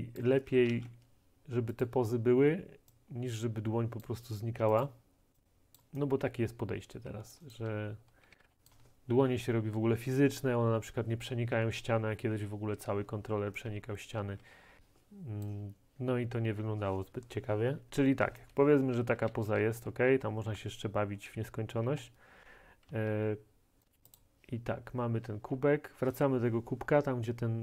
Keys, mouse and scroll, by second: 0.2 click, 0.7 ctrl+z, 1.9 middle click, 4.9 middle click, 5.8 click, 6.3-8.5 typing, 7.3 click, 8.7 right click, 11.2-13.8 right drag, 13.8-14.2 typing, 15.5-19.0 right drag, 19.0-21.9 typing, 23.0 d, 23.8 right click, 24.2 middle click, 25.5-27.2 scroll.